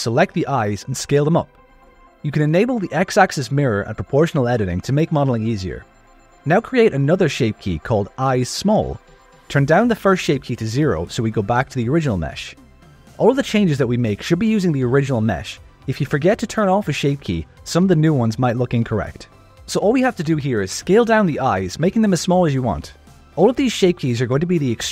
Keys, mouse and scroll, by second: 0.2 click, 1.4 click, 1.8 l, 2.4 s, 5.8 Tab, 6.6 click, 7.1-9.0 drag, 8.8 l, 10.1 click, 11.0 click, 13.1 Tab, 14.0 s, 16.6 alt+shift+click, 17.5 ctrl+KP_Add, 18.0 s, 21.3 click, 21.7 g, 23.7 Tab.